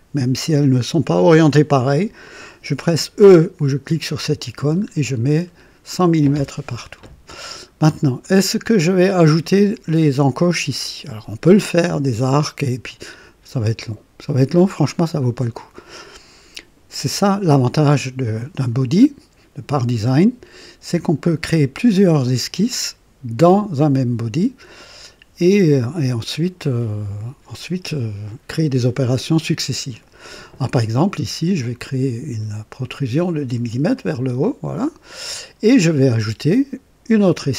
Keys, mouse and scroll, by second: 4.1 e, 4.8-5.6 scroll down 2, 7.7 scroll up 2, 8.2 right click, 8.8 middle click, 17.0 click, 31.6 click, 33.9 click, 35.0 scroll down 1.